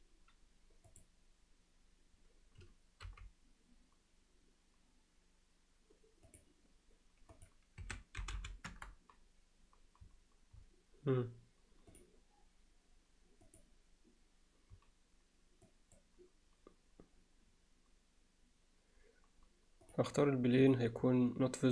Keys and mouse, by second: 0.9 click, 3.1 g, 7.4-9.7 drag, 8.4 0, 11.9 click, 15.7 click, 20.6 click.